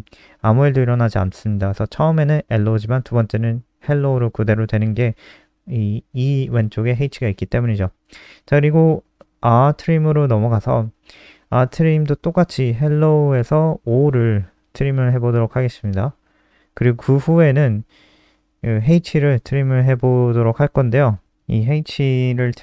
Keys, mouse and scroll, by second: 2.5 click, 4.6 ctrl+s, 4.8 F5, 6.8 click, 8.4 click, 8.6 scroll down 3, 9.4 click, 10.2 ctrl+c, 10.3 click, 10.5 click, 11.4 ctrl+v, 11.6 click, 11.7 ctrl+s, 12.0 click, 18.7 click.